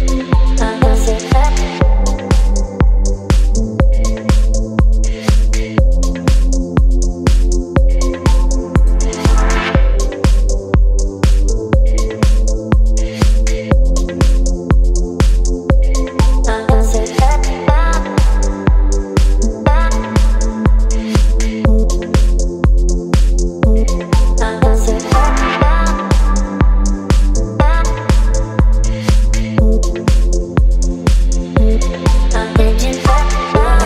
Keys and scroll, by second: 0.9 space, 17.3 Return, 29.2-30.7 typing, 32.9 v.